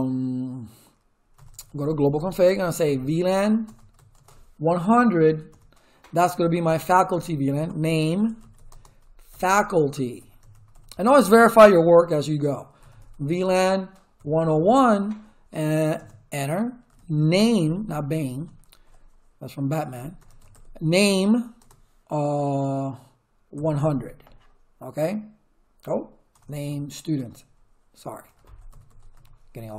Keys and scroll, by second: 1.1-11.2 typing, 12.5-15.0 typing, 15.9 Return, 16.6-17.7 typing, 19.9-21.6 typing, 23.3-24.2 typing, 26.3 BackSpace, 28.0-29.6 typing.